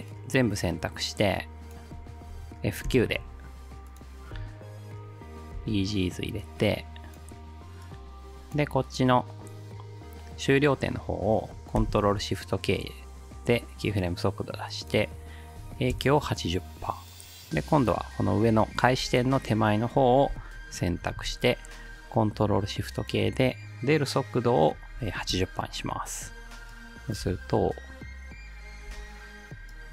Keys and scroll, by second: 2.9 F9, 4.3 space, 5.6 space, 11.8 ctrl+shift+k, 15.4-16.2 typing, 21.0 ctrl+shift+k, 24.7-25.6 typing, 27.2 space, 29.0 space.